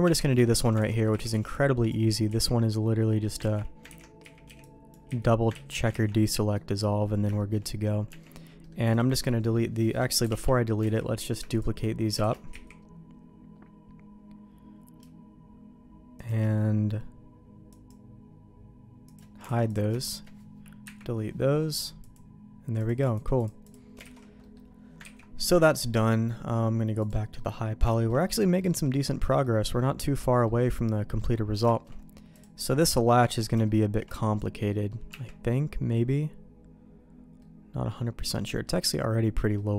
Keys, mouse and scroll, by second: 0.0 Tab, 0.4 shift+middle click, 0.9 alt+a, 0.9 middle click, 1.1 z, 1.3 b, 2.3 z, 2.6 middle click, 3.5 ctrl+q, 3.9 ctrl+x, 4.2 z, 4.5 b, 5.1 z, 5.5 ctrl+q, 5.9 ctrl+x, 6.3 middle click, 7.4 shift+middle click, 8.1 Tab, 8.6 middle click, 8.9 click, 10.2 KP_6, 10.8 KP_3, 10.9 alt+a, 11.5 shift+click, 12.2 shift+d, 17.7 click, 19.1 click, 19.5 alt+a, 19.7 click, 20.0 shift+click, 20.8 Delete, 21.7 click, 22.0 click, 22.8 click, 23.0 click, 23.4 click, 24.0 alt+a, 24.4 middle click, 25.1 ctrl+s, 27.0 click, 27.4 middle click, 27.9 shift+middle click, 28.6 middle click, 29.4 middle click, 30.4 middle click, 31.7 shift+middle click, 32.3 click, 32.7 middle click, 33.6 shift+middle click, 34.7 middle click, 35.1 Tab, 37.4 middle click, 38.3 middle click, 39.5 middle click.